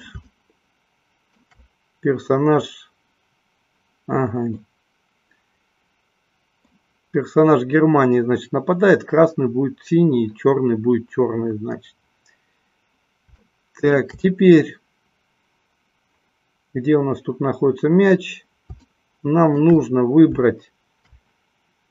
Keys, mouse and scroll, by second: 4.6-7.0 middle drag, 13.6 shift+middle click, 19.0 shift+middle click.